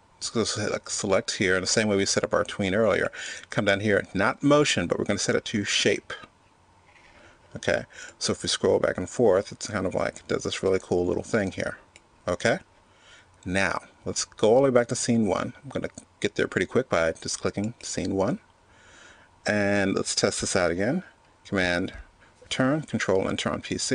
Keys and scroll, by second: 22.1 super+Return.